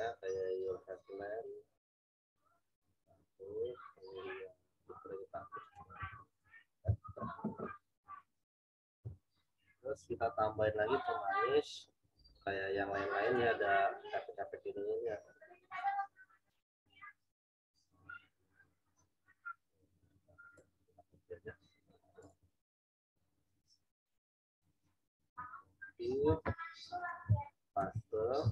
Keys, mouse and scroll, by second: 5.9 z, 6.2 alt+click, 13.2 click, 16.4-17.0 scroll down 1, 20.5 right click, 22.2 click, 25.6 click, 26.8 z, 26.9 click, 27.8 ctrl+v.